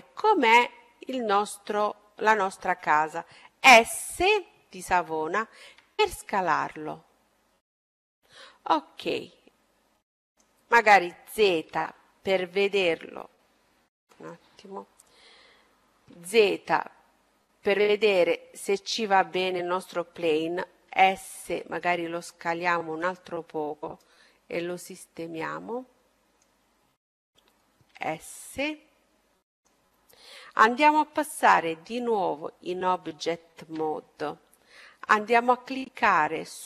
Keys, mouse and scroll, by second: 7.3 s, 11.6 s, 16.2 z, 17.3-19.1 middle drag, 20.5 s, 24.0-25.7 drag, 27.9 s, 33.4 Tab.